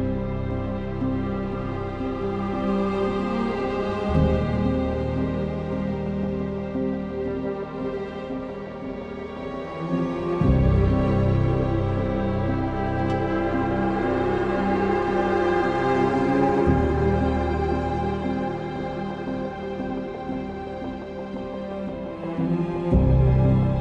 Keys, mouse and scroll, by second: 4.1 ctrl+z, 6.0 ctrl+z, 16.2 typing, 17.4 ctrl+z, 18.6 ctrl+z, 22.0 ctrl+z, 22.0-23.8 typing.